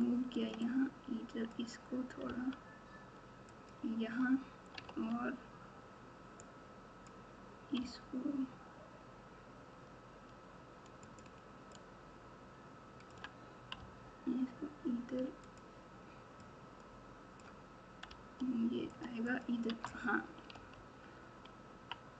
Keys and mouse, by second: 0.6 click, 2.2 g, 4.8 alt+z, 6.4 click, 6.6 click, 7.7 g, 11.8-13.1 drag, 13.7 g, 16.4 click, 16.6 click, 18.0 g, 19.3 click, 19.6 Tab, 20.5 alt+z, 21.5 KP_3.